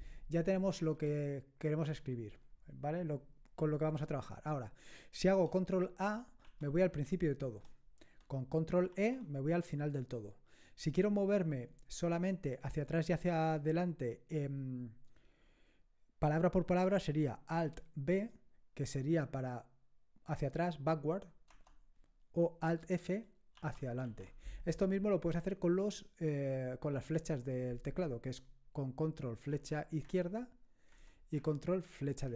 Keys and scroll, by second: 6.4 ctrl+a, 8.9 ctrl+e, 18.1 alt+b, 21.5 alt+b, 23.5 alt+f, 24.0 alt+f, 29.5 ctrl+Left, 30.0 ctrl+Left, 30.9 ctrl+Left.